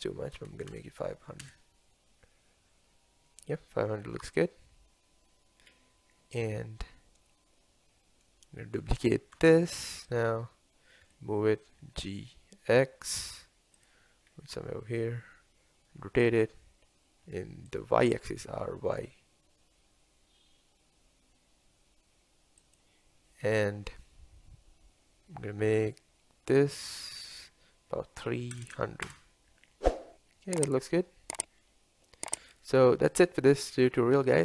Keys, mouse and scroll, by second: 1.4 KP_0, 6.0-6.7 scroll down 1, 6.7-9.4 middle drag, 9.4 shift+d, 11.2 g, 14.4-14.7 scroll up 2, 15.0 scroll down 1, 16.1 r, 18.5 r, 29.1 KP_0.